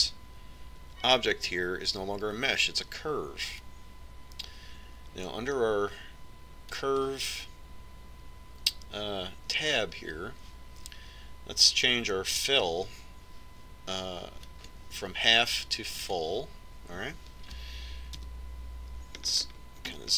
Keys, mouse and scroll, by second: 2.2 Tab, 8.1-17.6 drag, 19.6 KP_Decimal.